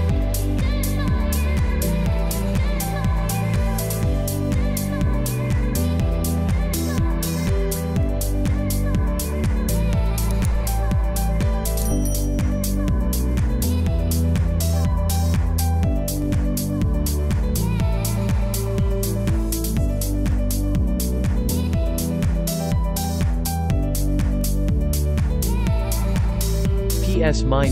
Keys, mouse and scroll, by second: 0.0-5.2 typing, 1.3 click, 2.2 click, 4.1 click, 4.6 click, 5.6 click, 6.7-9.4 typing, 6.8 click, 7.1 click, 7.7 click, 8.4 click, 8.5 click, 9.6 click, 11.1 z, 11.4 click, 18.3 ctrl+e, 18.8 ctrl+j, 19.4 ctrl+shift+s, 20.8 click, 21.4 ctrl+shift+a, 26.9 j, 27.6 click.